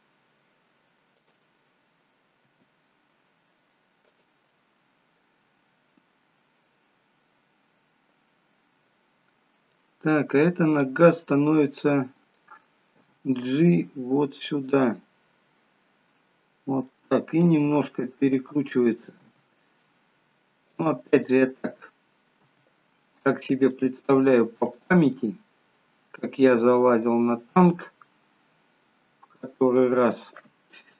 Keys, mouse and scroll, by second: 2.6 r, 4.5 middle click, 10.9 click, 11.3 middle click, 13.1 g, 15.2 middle click, 17.7 r, 19.3 g, 21.2 middle click, 22.7 g, 24.8 click, 25.3 middle click, 26.7 g, 28.2 middle click.